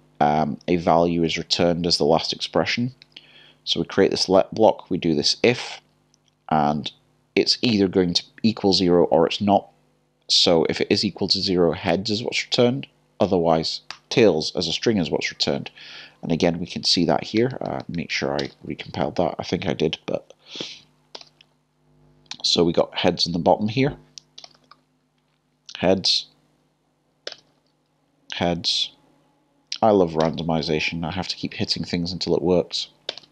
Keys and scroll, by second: 3.0 k, 14.8 j, 21.1-22.8 typing.